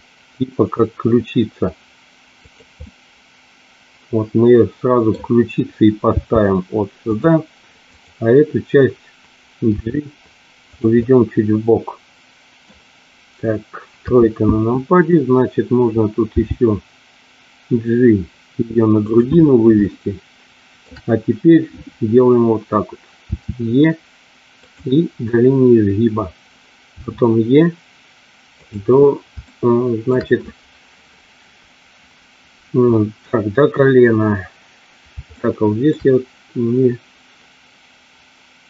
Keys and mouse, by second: 2.4 click, 2.8-5.1 middle drag, 6.1 g, 7.1 click, 7.8 click, 9.8 g, 10.6 click, 10.9-12.5 middle drag, 14.0 KP_3, 16.2 g, 19.0 click, 19.8-20.8 shift+middle drag, 23.1 e, 24.5 click, 26.9 e, 28.5 click, 29.4 shift+middle click, 35.3 shift+middle click.